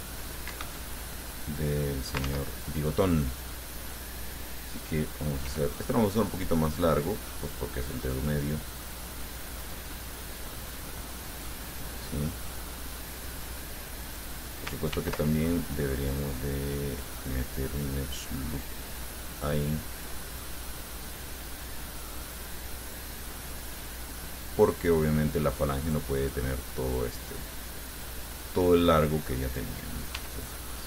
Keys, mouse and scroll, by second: 0.7 Escape, 1.1-2.5 drag, 2.5 ctrl+z, 2.8-4.8 ctrl+drag, 5.7 e, 11.5 click, 12.0-14.5 drag, 15.2 ctrl+r, 19.6 click, 24.9 click, 26.1 click, 26.4 click, 28.1 right click, 29.0 middle click, 30.4 e.